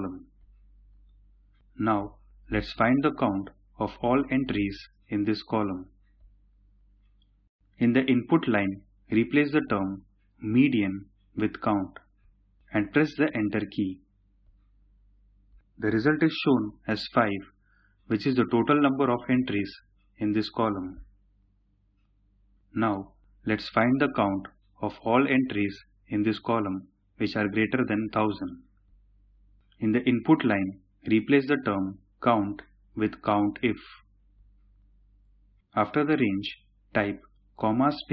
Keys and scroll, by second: 9.1 typing, 10.9-11.6 typing, 13.1 Return, 31.1 typing, 33.4-34.1 typing, 37.4-38.1 typing.